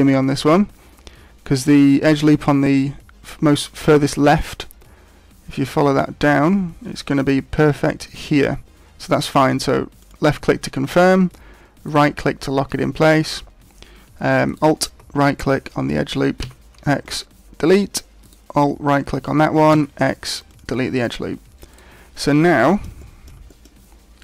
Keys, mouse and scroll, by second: 11.9 right click, 14.4 alt+right click, 16.4 x, 18.2 alt+right click, 19.7 x, 21.8 right click, 22.6 shift+middle click, 23.0 middle click, 23.5 shift+middle click, 23.9-24.2 scroll up 3.